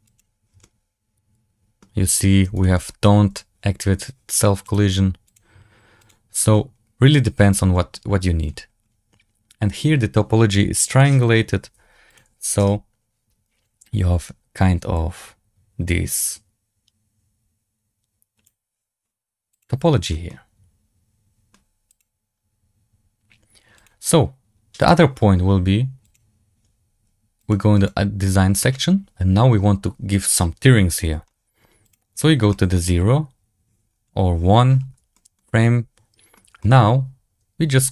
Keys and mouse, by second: 0.2 click, 0.5-1.7 middle drag, 0.8 click, 2.5 shift+middle drag, 4.6 click, 5.9 click, 12.3 click, 15.1-18.8 drag, 20.2-21.4 middle drag, 21.8 click, 23.9-24.8 drag, 26.0 click, 27.4 click, 27.7 click, 31.7 click, 32.4 middle click, 35.0 shift+middle drag, 35.4-36.2 middle drag, 36.5 shift+middle drag.